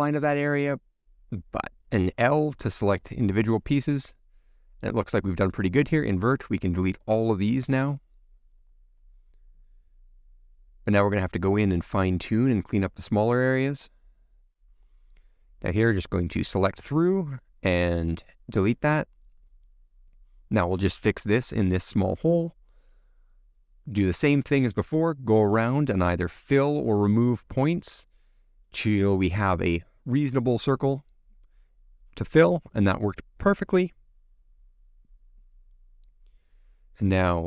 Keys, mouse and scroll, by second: 2.1 l, 2.7-3.7 middle drag, 3.7 l, 4.3 l, 4.7 click, 5.1 l, 5.4-7.9 middle drag, 7.9 click, 8.1-10.6 middle drag, 10.6 x, 10.8 middle click, 11.2 scroll up 1, 11.3 scroll down 1, 11.5-12.0 scroll up 2, 11.7 shift+middle click, 12.0-13.1 middle drag, 13.8 middle click, 14.2 scroll down 3, 14.5 shift+middle click, 14.6 scroll up 1, 14.8 middle click, 15.1 click, 15.9 c, 18.4 x, 18.5 middle click, 18.9-19.3 scroll down 1, 19.3 click, 19.4-20.6 middle drag, 20.6 click, 21.3 x, 21.4 middle click, 22.1 scroll up 2, 22.3 shift+middle click, 22.9 click, 23.0-24.0 middle drag, 24.0 shift+click, 24.2 shift+click, 24.4 shift+click, 24.8 f, 24.9 middle click, 25.8 click, 25.9 a, 26.0 a, 26.1 click, 26.5 scroll up 1, 26.6 middle click, 27.3 click, 27.4 middle click, 27.8 shift+click, 28.0 shift+click, 28.2 middle click, 28.6 f, 28.8 middle click, 29.0 click, 29.1 middle click, 29.7 click, 30.5-31.9 middle drag, 31.9-34.2 drag, 34.2-36.5 middle drag, 36.5 scroll up 3, 36.8-37.4 middle drag.